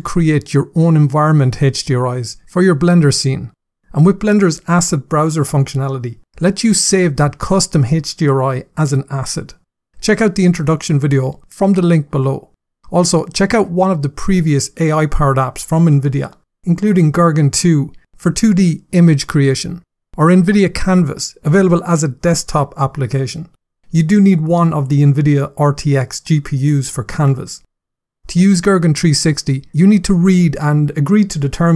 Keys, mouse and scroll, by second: 6.2-7.4 scroll down 8, 30.7 click.